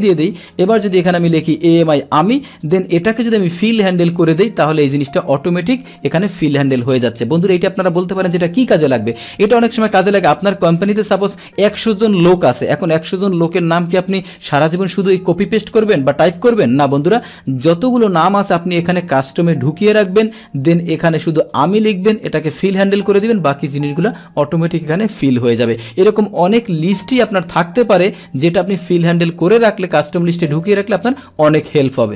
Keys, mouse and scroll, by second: 0.2 click, 1.7 Return, 2.5 click, 2.6 Return, 3.5 click, 21.4 click, 22.4 click, 22.6 click, 23.4 click.